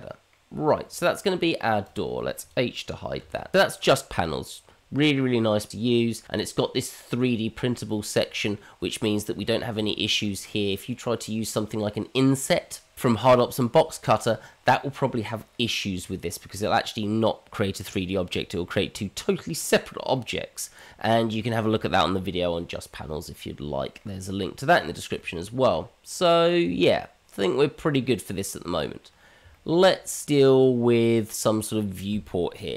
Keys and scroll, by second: 3.2 h.